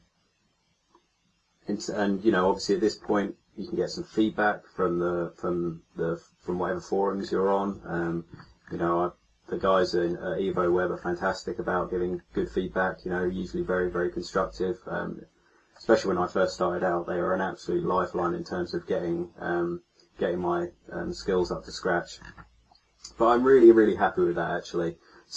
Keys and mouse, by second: 11.9-13.2 middle drag, 13.2 click, 21.1 middle click.